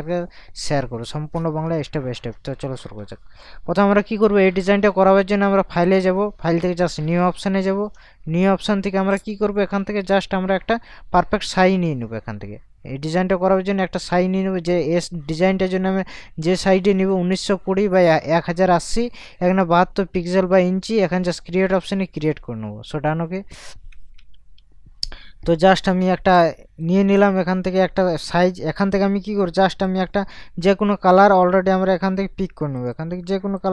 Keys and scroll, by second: 14.2 ctrl+KP_Subtract, 24.3 ctrl+KP_Subtract.